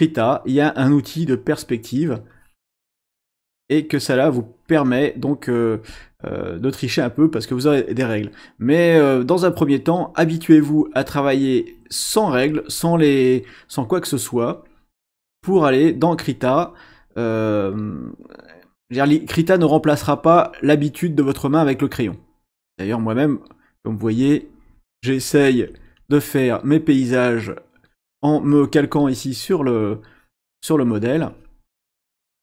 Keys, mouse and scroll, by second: 1.3 click, 2.3 click, 4.2-5.6 drag, 9.4 click, 15.0 click, 16.5 click, 18.3-20.8 drag, 22.7-26.2 drag, 29.7 click, 30.2-31.7 drag, 31.8-32.4 drag.